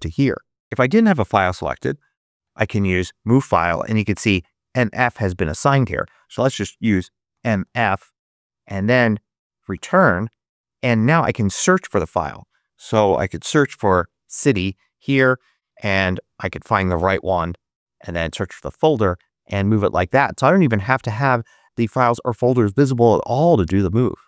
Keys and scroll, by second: 0.6-2.8 typing, 5.7 super+a, 5.8 super+BackSpace, 7.2 m, 7.5 f, 9.6 Return, 12.7-13.9 typing, 16.0 Down, 16.4 Up, 17.1 Return.